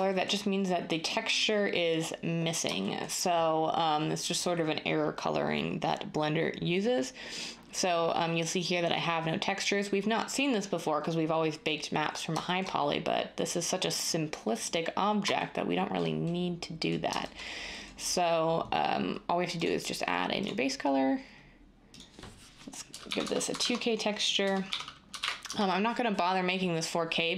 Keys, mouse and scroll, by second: 22.8-25.4 typing.